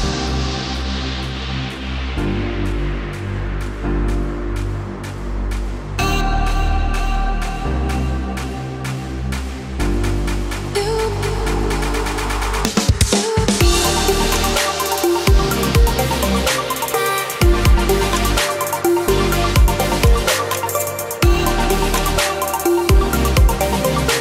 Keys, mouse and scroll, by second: 8.6-10.5 shift+middle drag, 12.6 click, 13.0 scroll up 1, 13.1 shift+middle click, 13.2 right click, 13.4 click, 13.9 click, 14.4 right click, 15.0 click, 15.3 right click, 15.5 shift+right click, 15.6 click, 15.9 right click, 16.3 click, 16.7 click, 17.0 click, 17.3 click, 17.6 click, 17.9 right click, 18.0 click, 18.1 middle click, 18.3 click, 18.6 click.